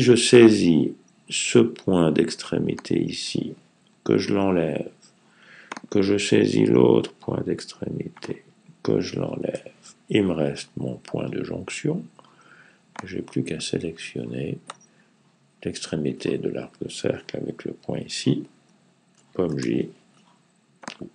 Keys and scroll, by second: 19.3 super+j.